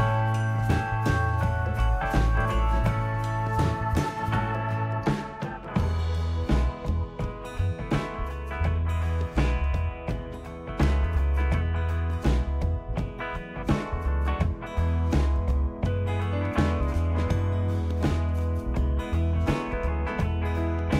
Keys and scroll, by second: 10.7 ctrl+d.